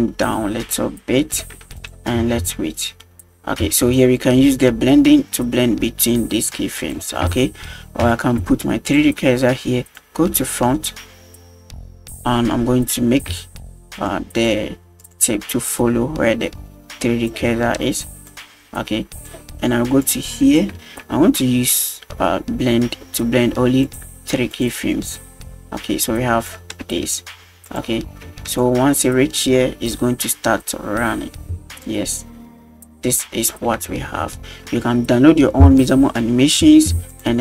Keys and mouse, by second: 1.8 click, 2.2 space, 3.7 space, 4.2 click, 7.4 shift+middle drag, 8.1 shift+middle drag, 8.9 click, 10.0 click, 13.4 shift+click, 14.5 shift+click, 15.7-17.3 shift+drag, 18.3 click, 20.0-20.6 drag, 20.8 a, 23.9 click, 24.5 click, 25.2 click, 26.9 space, 27.7 drag, 28.3 space, 28.6 click, 31.5 space, 31.9 click, 33.9 middle drag, 34.3 shift+middle drag, 37.1 click.